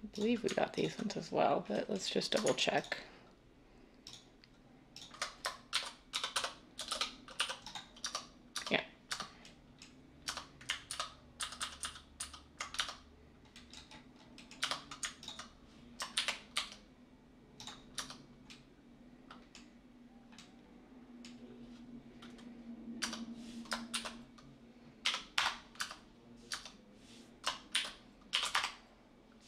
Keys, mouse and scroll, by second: 5.7-8.0 typing, 10.2 Tab, 10.9 ctrl+z, 11.3 ctrl+z, 11.5 ctrl+z, 12.7 Tab, 14.5 Tab, 16.1 e, 17.1 typing, 17.9 Tab, 21.1 typing, 23.9-25.7 typing, 27.7-29.4 typing.